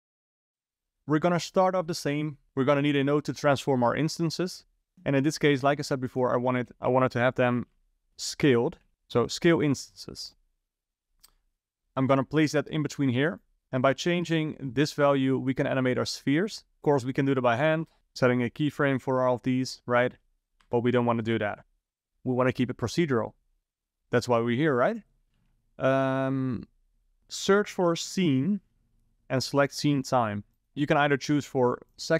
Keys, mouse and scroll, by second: 2.4 middle click, 2.7 shift+a, 5.8 shift+a, 6.9 shift+a, 10.5-11.5 scroll up 4, 11.5 click, 13.4 click, 13.8-16.8 drag, 16.9-18.0 drag, 18.0 u, 18.4 u, 19.3 i, 20.7 ctrl+z, 25.4 shift+a, 30.7 click, 31.7 click.